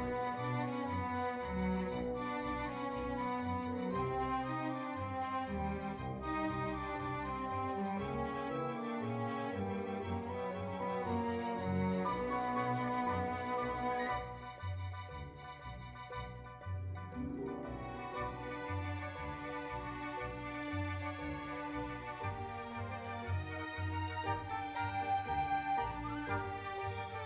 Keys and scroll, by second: 13.8-14.8 typing, 19.7-20.5 typing.